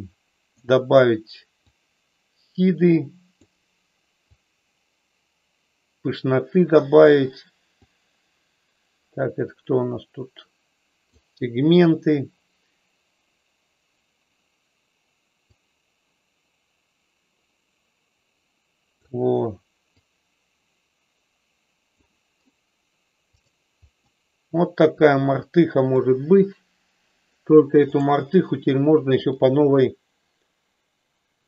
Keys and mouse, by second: 1.9-3.4 drag, 4.2-7.1 drag, 7.7-11.1 drag, 15.5-19.1 drag, 20.0-21.9 drag, 23.2 click, 24.0-26.0 middle drag, 29.1-31.4 drag.